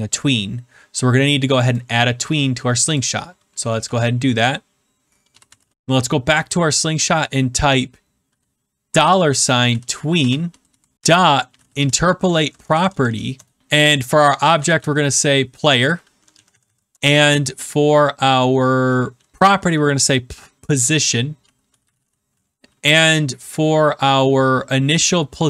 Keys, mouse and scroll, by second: 1.7 right click, 2.9 click, 3.8-6.0 typing, 6.3 click, 8.8-12.3 typing, 12.7 Down, 12.8 Down, 13.0 Down, 13.3 Return, 14.3-15.1 typing, 16.4 Down, 16.8 Return, 16.9 ,, 19.7 typing, 21.1-22.6 typing.